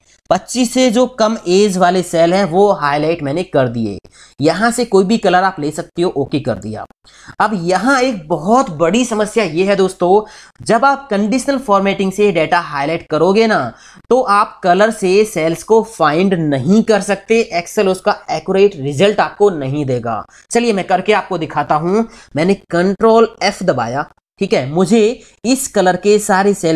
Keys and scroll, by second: 23.6 ctrl+f.